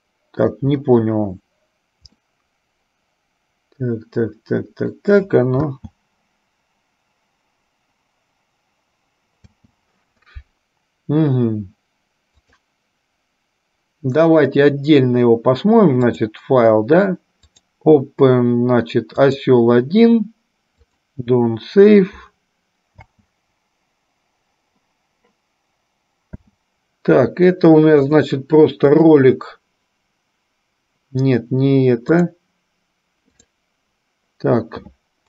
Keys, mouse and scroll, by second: 0.0 shift+middle click, 2.3-5.2 middle drag, 5.9 space, 9.7 space, 12.7-15.8 drag, 16.2-21.8 drag, 23.0 space, 26.7 space, 32.3 click.